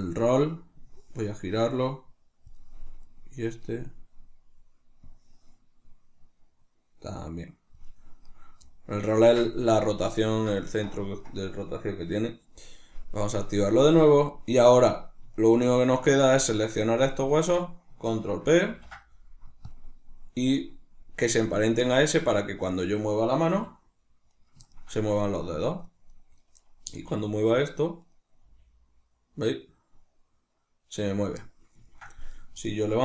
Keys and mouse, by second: 3.0 right click, 8.3 right click, 9.0-14.5 ctrl+middle drag, 14.5 right click, 15.4 shift+right click, 15.8 shift+right click, 16.1 shift+right click, 16.4 shift+right click, 17.2 shift+right click, 18.7 ctrl+p, 19.7 click, 21.8 middle click, 22.2 Tab, 22.6 right click, 23.5 r, 24.4 right click, 24.7-26.2 ctrl+middle drag, 26.2 right click, 27.0-28.2 middle drag, 27.0 g, 28.2 right click, 28.4 g, 31.2 right click, 31.9 ctrl+middle click, 32.3 right click.